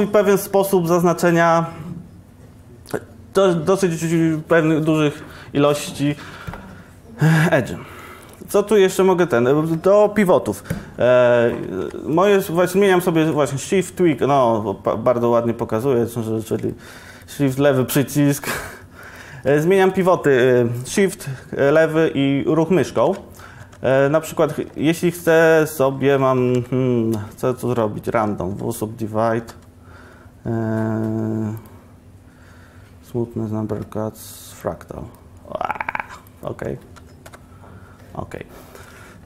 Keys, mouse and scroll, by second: 23.7 1, 26.5 a, 26.6 a, 28.6 w, 29.6 w, 31.8 w, 31.9 w, 34.7 click, 38.9 Tab.